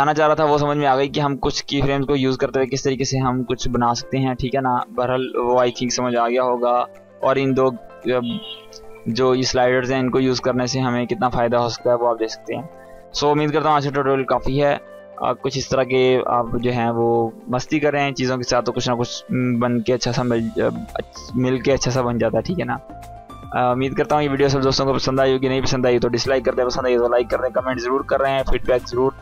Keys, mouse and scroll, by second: 0.1 space, 2.5-5.4 drag, 12.1 click.